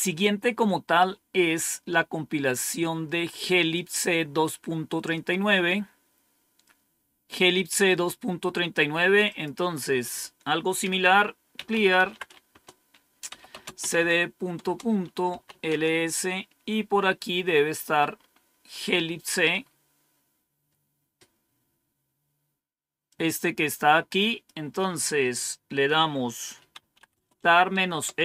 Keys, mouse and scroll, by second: 3.6 click, 4.5-5.9 drag, 9.1 click, 11.2-17.4 typing, 18.0-18.6 scroll up 1, 18.6-19.4 scroll up 1, 19.4-20.9 scroll up 1, 22.9-25.0 drag, 26.1-28.2 typing.